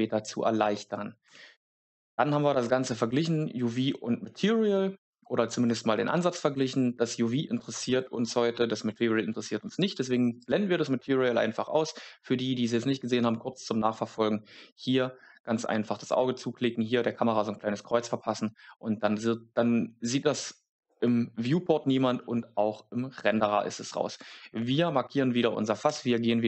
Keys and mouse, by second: 1.2 Tab, 1.6 right click, 9.7 click, 10.3 click, 24.0 right click, 25.8 Tab.